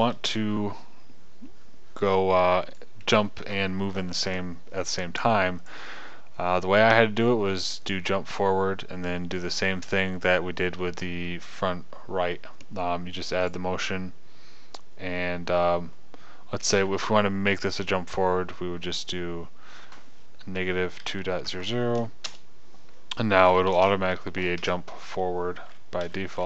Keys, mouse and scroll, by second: 0.6 KP_0, 3.1-6.1 drag, 23.3-24.4 drag, 25.1 KP_0.